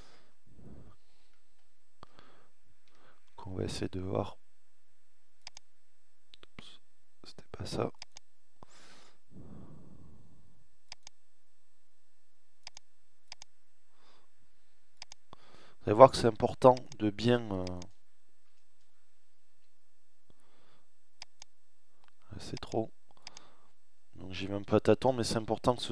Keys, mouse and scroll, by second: 2.5-4.4 scroll up 1, 17.6 BackSpace, 23.2 BackSpace.